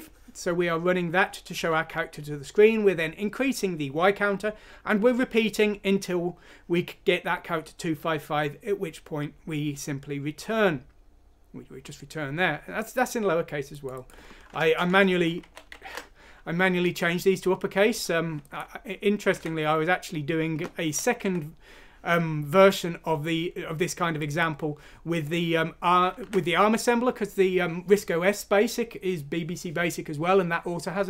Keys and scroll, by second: 14.9-16.3 typing, 19.3 alt+Tab, 21.1 alt+f, 26.1 alt+Tab.